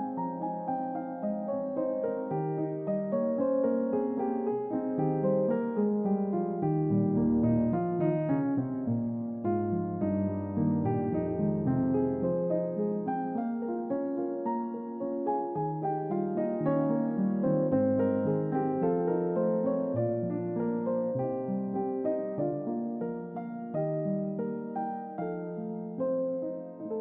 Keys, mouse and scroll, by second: 0.1-3.4 drag, 11.2-13.7 drag, 19.3 click, 21.1 shift+d, 22.0 click, 25.2-26.4 drag.